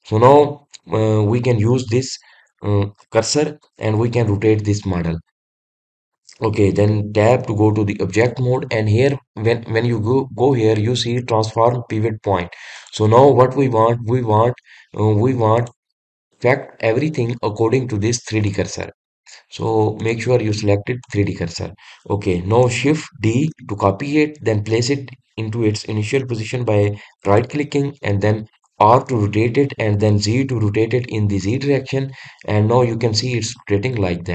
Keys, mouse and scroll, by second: 13.7-19.5 drag, 20.9-24.0 drag, 24.2 shift+d.